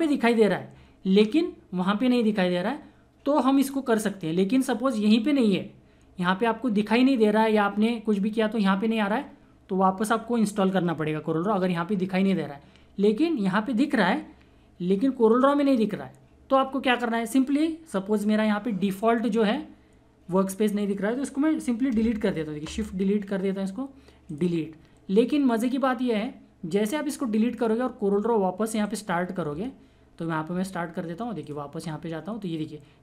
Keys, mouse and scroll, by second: 1.2 click, 1.2 typing, 21.8 shift+Num_Lock, 22.4 shift+Delete, 24.2 click, 27.5 click, 31.4 click.